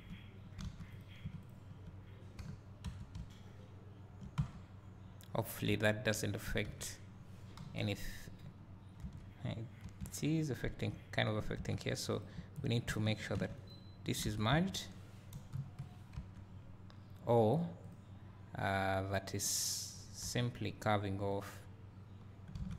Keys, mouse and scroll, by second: 0.0 space, 0.6 alt+a, 1.0 click, 1.5 shift+click, 2.5 j, 3.0 Tab, 3.1 `, 5.7 `, 6.8 Tab, 7.6 KP_1, 9.1 Tab, 11.6 alt+a, 12.2 click, 12.6 shift+click, 14.2 alt+a, 14.6 Tab, 15.6 KP_1, 16.3 Tab, 17.9 click, 20.3 g, 21.3 click, 22.6 alt+a.